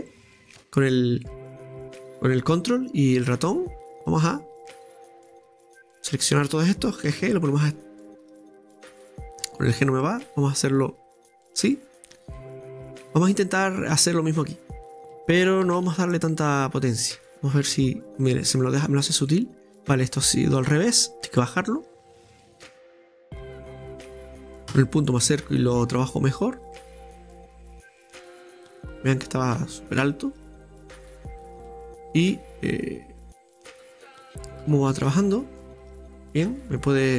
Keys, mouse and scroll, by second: 0.0 ctrl+click, 5.3-7.1 ctrl+drag, 7.1 g, 9.4 ctrl+z, 9.7-11.7 drag, 11.7-12.9 middle drag, 12.9 click, 13.0-13.3 scroll up 1, 13.4-14.9 middle drag, 14.9 g, 15.4 right click, 15.6 g, 17.2 scroll down 2, 17.8 Tab, 17.9-18.2 scroll down 2, 18.2-20.5 middle drag, 19.2 click, 20.6 Tab, 20.9 scroll up 2, 21.6 shift+right click, 22.0-23.0 drag, 23.0-24.7 middle drag, 24.7 KP_Decimal, 25.4-26.6 scroll up 2, 25.6 middle click, 26.6 scroll down 1, 26.7-27.8 middle drag, 27.8-30.6 drag, 30.6-31.5 scroll down 2, 30.8-33.2 middle drag, 33.2-34.6 drag, 34.6 Tab, 34.9-35.2 scroll down 2, 35.2 middle click, 35.7-36.3 scroll down 5, 36.3-37.1 middle drag.